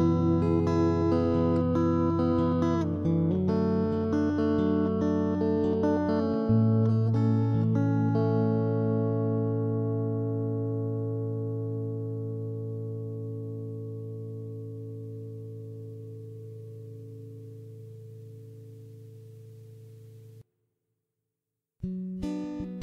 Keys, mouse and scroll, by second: 0.0-2.0 typing, 0.3 right click, 1.0 ctrl+z, 1.0 right click, 1.2 middle click, 2.1 right click, 2.5 ctrl+KP_3, 3.0 alt+r, 3.5 middle click, 4.4 a, 4.6 c, 4.9 w, 5.0 right click, 5.3 middle click, 5.7 ctrl+KP_3, 5.9 middle click, 6.1 ctrl+s, 6.6 middle click, 6.6 right click, 6.7 click, 7.4 right click, 8.0 click, 8.0 middle click, 8.5 click, 9.0 middle click, 9.4 g, 10.6 x, 11.0 middle click, 11.2 right click, 11.5 middle click, 12.2 middle click, 12.7 click, 13.1 middle click, 13.7 g, 14.2 middle click, 14.7 x, 15.1 ctrl+z, 15.3 middle click, 16.1 a, 16.4 right click, 16.9 click, 17.3 click, 17.5 middle click, 18.2 click, 18.5 middle click, 19.3 middle click, 19.5 g, 20.3 middle click, 20.5 x, 20.7 middle click, 21.0 ctrl+KP_3, 21.1 middle click, 22.3 right click.